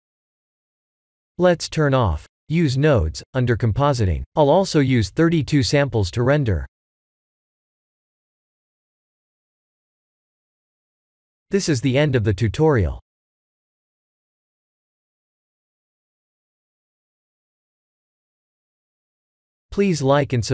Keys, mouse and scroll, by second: 0.5 click, 1.8 click, 2.3 click, 8.3 click, 8.6 click, 9.0 ctrl+s.